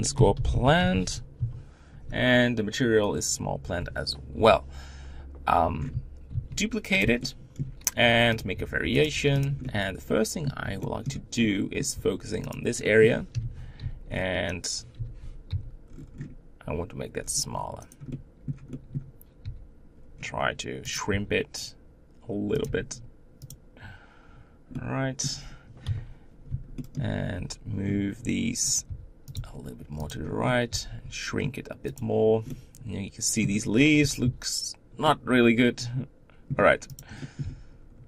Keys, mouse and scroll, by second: 1.4 l, 4.4 KP_7, 5.6-6.3 scroll down 1, 6.3 shift+d, 7.2 shift+middle click, 8.0 g, 8.5 r, 9.1 g, 9.6-12.0 middle drag, 12.0 Tab, 12.5 click, 12.8 middle click, 13.3 o, 13.8 g, 14.9 o, 15.5 g, 18.1-19.4 middle drag, 19.4 g, 21.1 r, 22.6 g, 24.8-25.8 middle drag, 25.8 KP_7, 26.8 shift+middle click, 27.2 g, 28.9 r, 29.3 g, 30.3-30.7 scroll up 1, 30.7 g, 32.5-34.2 middle drag, 34.2 ctrl+z, 35.0-37.0 middle drag, 37.0 click, 37.2 middle click, 37.4 g.